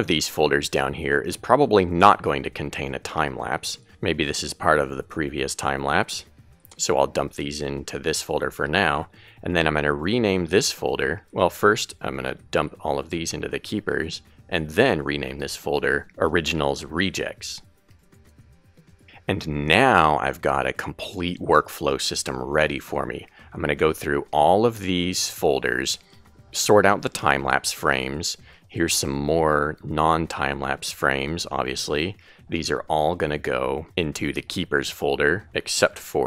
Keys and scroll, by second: 2.1 Right, 16.0-18.2 typing, 19.8 Left, 34.7 super+a.